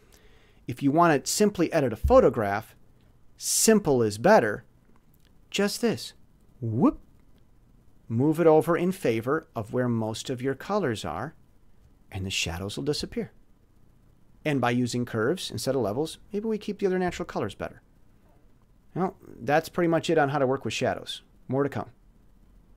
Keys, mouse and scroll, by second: 3.8 click, 6.0 click, 18.5 click, 22.5 click.